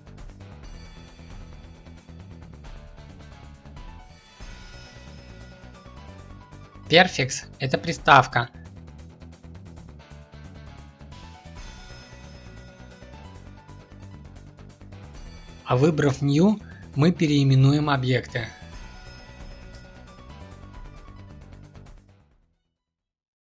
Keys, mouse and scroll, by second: 3.7 ctrl+F2, 14.0 ctrl+F2, 18.6 o.